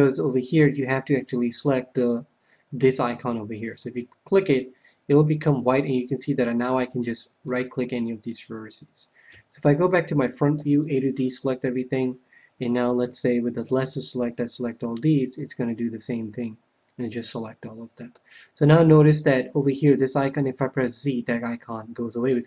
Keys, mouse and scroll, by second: 3.7-5.4 drag, 6.4-9.2 right drag, 9.2 KP_1, 10.5 a, 13.8-15.4 ctrl+drag, 15.2-17.1 middle drag, 20.7 z.